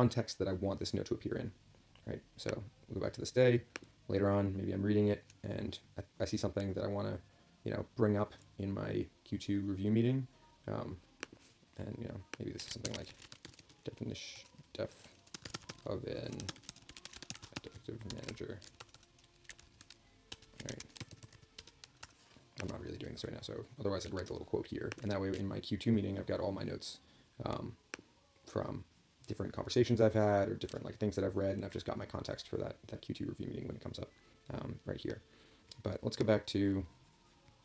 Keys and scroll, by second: 12.8 ctrl+k.